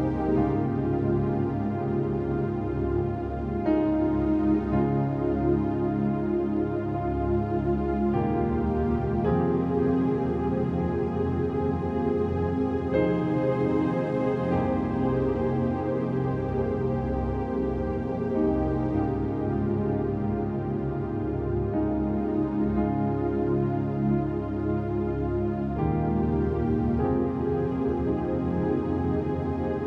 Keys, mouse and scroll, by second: 0.3 click, 0.8 scroll down 1, 1.1 space, 1.2 click, 1.4 space, 1.6 scroll down 1, 1.7 space, 1.8 click, 1.9 space, 2.9-3.6 scroll down 1, 3.6 click, 4.6 right click, 6.3 click, 9.3 click, 10.8 click, 11.7 click, 12.3 click, 16.2 click, 18.8 click, 20.5 click, 20.9 click, 24.3 click, 27.3 click.